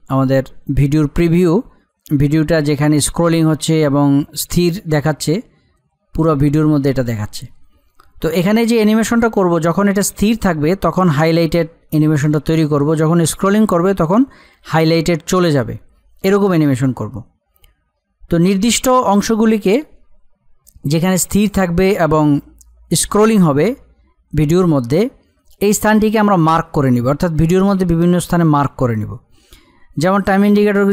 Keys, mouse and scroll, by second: 30.5-30.9 drag.